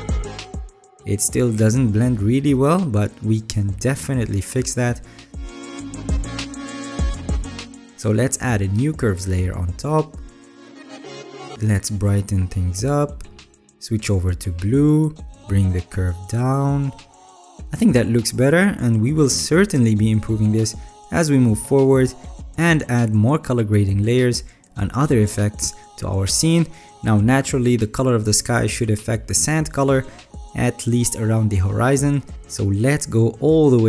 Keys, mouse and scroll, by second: 1.1 alt+right click, 28.3 alt+scroll up 1, 28.4 alt+scroll.